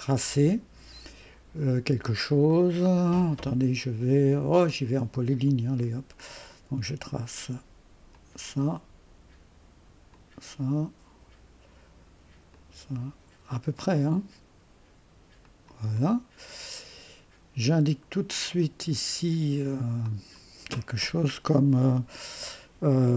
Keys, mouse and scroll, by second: 2.0-3.8 scroll up 2, 2.5-4.7 right drag, 3.8-4.7 scroll up 1, 4.7 click, 5.8-6.3 scroll up 2, 8.1 click, 10.1 click, 12.5 click, 13.8 click, 15.4 click, 16.0 middle click, 16.0-17.6 right drag, 18.1 click, 20.0 click.